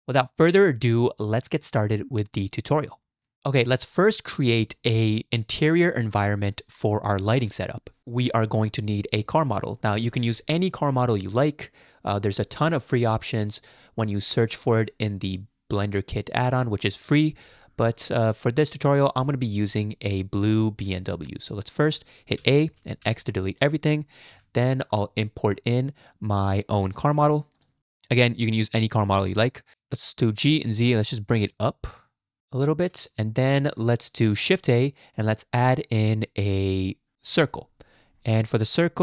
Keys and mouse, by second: 1.5-2.7 drag, 8.6 a, 8.9 x, 11.0-14.6 drag, 22.4 a, 23.0 x, 24.3 n, 27.8 n, 29.7 g, 33.3 shift+click, 34.6 shift+a.